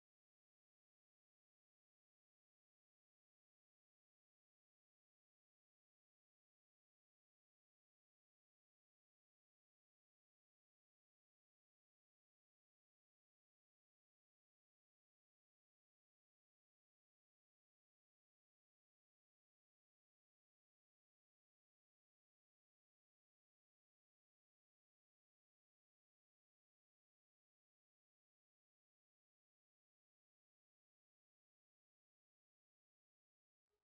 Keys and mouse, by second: 0.4 s, 2.1 Tab, 4.1 Tab, 6.2 shift+right click, 10.3 middle click, 10.6 click, 10.6 right click, 11.1-12.7 middle drag, 12.8 KP_3, 24.3-27.5 middle drag, 28.4-30.1 drag, 30.1 middle click, 31.0 Tab.